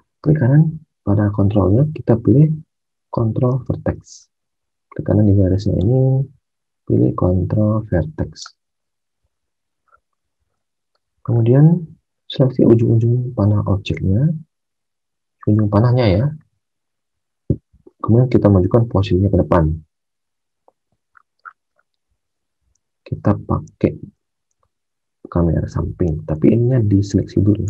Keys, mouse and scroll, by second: 3.5 alt+Tab, 10.3 alt+Tab, 23.6 alt+Tab, 24.4 alt+Tab, 26.4 alt+Tab, 26.6 alt+Tab.